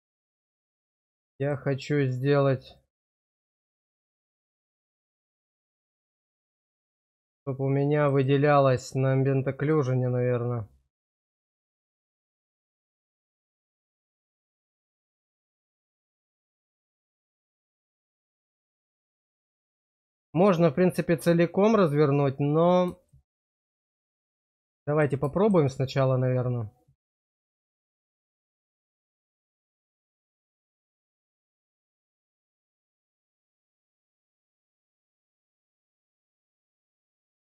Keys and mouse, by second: 0.0 shift+click, 1.4 shift+click, 2.7 shift+click, 3.1 shift+click, 3.8 middle click, 4.7 shift+middle click, 6.4 shift+click, 8.1 shift+click, 9.5 shift+click, 9.7 shift+click, 10.8 shift+click, 11.0 shift+click, 11.9 middle click, 12.3 shift+middle click, 13.2 shift+click, 13.3 shift+click, 14.5 shift+click, 15.4 shift+click, 15.6 shift+click, 16.3 shift+middle click, 18.0 shift+click, 18.6 shift+middle click, 19.3-20.3 middle drag, 23.2-24.2 shift+middle drag, 24.6 middle click, 27.2 click, 27.4 click, 29.4 shift+click, 30.9 shift+click, 31.1 shift+click, 31.8 middle click, 33.3 shift+click, 35.9 middle click, 36.9 shift+middle click.